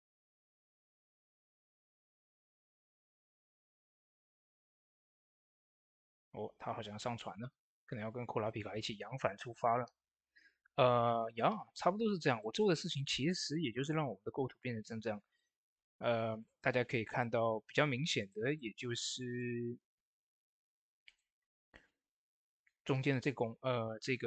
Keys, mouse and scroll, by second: 0.6 ctrl+x, 1.0 click, 2.0 ctrl+x, 2.2 click, 2.7 ctrl+x, 3.1 click, 3.4 ctrl+x, 4.0 click, 4.4 ctrl+x, 5.0 click, 5.9 ctrl+d, 7.7 click, 12.2 click, 12.2 click, 15.2 v, 16.3 click.